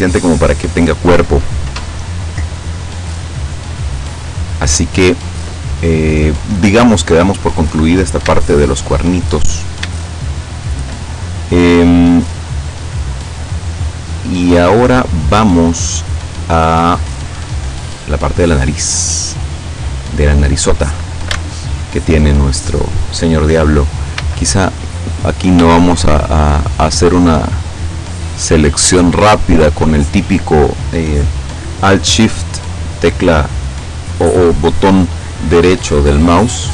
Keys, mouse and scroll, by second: 7.9-8.2 scroll up 2, 8.5 shift+middle click, 9.6 shift+scroll up 1, 10.0-11.0 shift+middle drag, 12.4-12.7 scroll down 1, 14.9-17.7 middle drag, 17.8-18.1 scroll up 1, 19.9 right click, 20.5 right click, 21.7 alt+shift+right click, 24.2 a, 25.1 right click, 25.9 shift+right click, 26.8 shift+right click, 28.4 shift+right click, 28.9 shift+right click, 29.5 shift+right click.